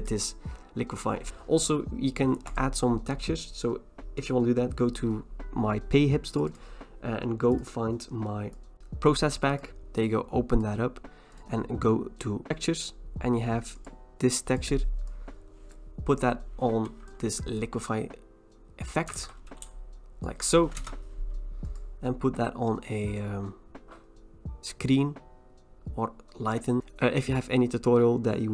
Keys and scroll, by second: 19.2 ctrl+t, 20.8 Return.